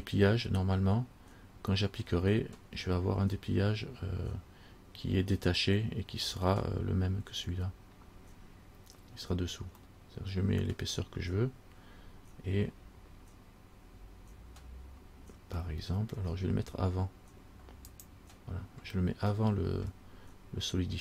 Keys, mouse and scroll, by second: 10.2 middle click, 15.9 middle click, 18.1 click, 19.6 middle click.